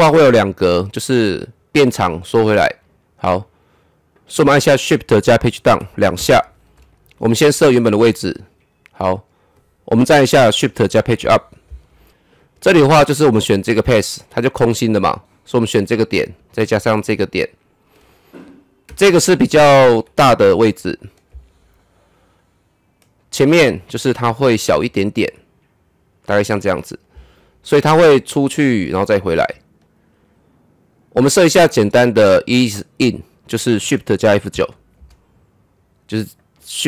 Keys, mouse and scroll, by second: 5.4 ctrl+z, 5.6 shift+Page_Down, 7.7 click, 10.6 shift+Num_Lock, 10.6 click, 11.2 shift+Page_Up, 12.1 click, 18.9 shift+Right, 22.3-24.2 drag, 24.2 shift+Left, 28.0-31.2 drag, 34.2 shift+Num_Lock, 34.2 click, 34.5 shift+F9, 36.2 click, 36.6 right click.